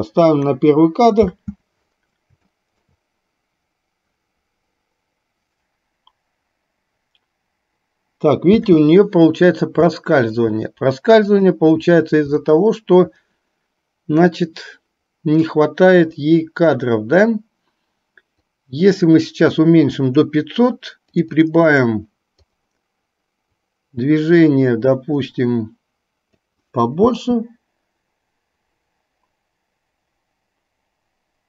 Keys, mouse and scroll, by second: 0.4 click, 1.3 space, 8.6 space, 11.4 click, 12.4-13.1 shift+middle drag, 18.6-20.3 drag, 21.3-22.6 drag, 23.8-26.6 drag, 27.2 space.